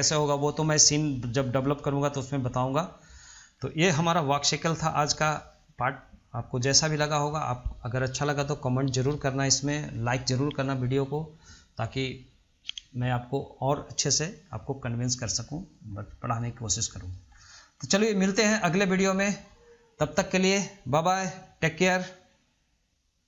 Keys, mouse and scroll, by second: 0.1 scroll down 2, 0.4-3.6 shift+middle drag, 3.6 scroll down 1, 3.9-4.6 shift+middle drag, 4.6 scroll up 1, 4.9-5.3 shift+middle drag, 5.3-5.6 scroll down 1, 5.6 middle click, 6.0 scroll up 1, 6.2-9.9 middle drag, 15.7 middle click, 16.2 scroll down 1, 16.5 middle click, 16.9 scroll up 1, 17.1-17.5 middle drag, 17.5-17.8 scroll down 1, 17.8 middle click, 18.2 scroll up 1, 18.5 middle click, 19.0 scroll down 1, 19.1 scroll up 1, 19.3-22.3 middle drag.